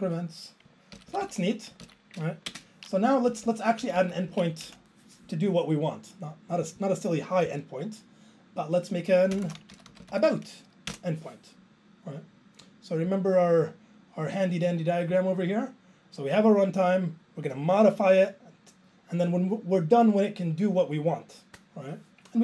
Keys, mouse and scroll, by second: 0.0 Up, 0.1 Up, 1.0 ctrl+k, 1.1 ctrl+k, 1.2 ctrl+k, 1.9 ctrl+k, 2.5 alt+space, 3.3 Up, 3.5 Up, 3.8 Down, 4.0 Down, 4.3 Left, 4.7 Return.